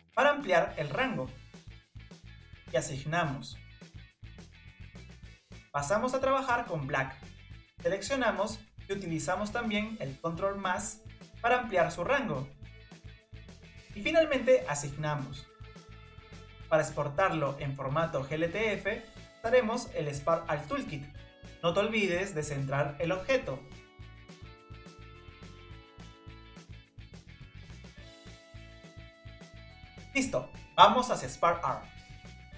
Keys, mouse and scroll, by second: 3.8-6.2 drag, 7.1 drag, 7.9-8.8 drag, 9.6-10.9 drag, 10.9 ctrl+KP_Add, 11.7 ctrl+KP_Add, 14.5-15.9 drag, 17.6-20.6 middle drag, 22.3 Tab, 24.7-27.9 drag.